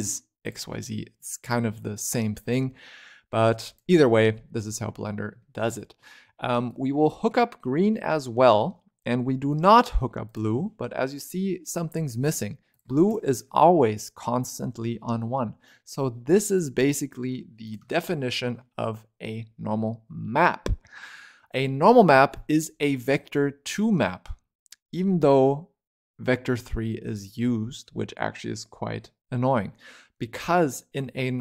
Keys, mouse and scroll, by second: 2.0 middle click, 2.4 click, 4.5-5.3 scroll up 1, 5.3-6.6 shift+middle drag, 6.6 click, 9.4 click, 10.7-11.3 scroll up 6, 11.3-12.6 scroll down 7, 12.6 click, 15.1-15.4 scroll down 5, 15.4-15.7 scroll up 7, 16.2 click, 16.7 g, 17.7 shift+middle click, 18.0-18.5 scroll up 6, 18.5 shift+middle click, 19.0-20.9 scroll down 3, 20.9-21.7 scroll down 2, 21.7-22.0 scroll up 1, 22.0 shift+middle click, 22.5 click, 23.0-24.2 scroll down 1, 24.2-26.1 scroll down 1.